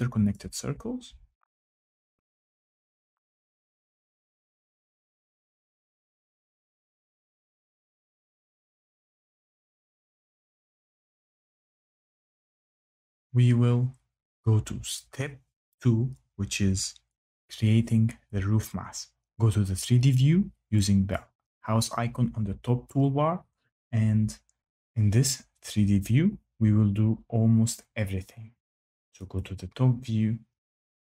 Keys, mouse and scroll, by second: 0.0 click, 1.3 Escape, 1.5 click, 1.9 click, 2.1 click, 2.3 Escape, 2.6 click, 2.9 click, 3.1 Escape, 3.3 click, 4.1 click, 4.3 click, 4.4 Escape, 4.7 click, 4.9 click, 5.2 click, 5.4 Escape, 5.8 click, 6.0 click, 6.3 click, 6.4 Escape, 6.6 click, 6.7 click, 6.9 click, 7.0 Escape, 7.1 click, 7.2 click, 7.6 click, 7.6 click, 7.8 click, 8.1 click, 8.8 Escape, 9.0 Escape, 9.1 click, 9.1 Delete, 9.3-10.1 typing, 9.5 click, 9.8 click, 10.0 click, 10.3 click, 10.6 click, 10.7 Escape, 10.9 click, 11.0 click, 11.2 click, 11.3 Escape, 11.8 Escape, 21.1 click, 22.7-24.7 drag, 29.3 click.